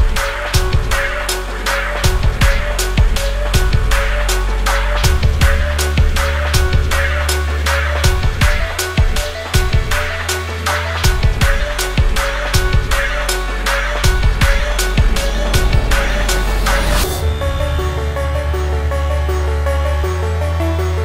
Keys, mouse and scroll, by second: 16.2-21.0 drag.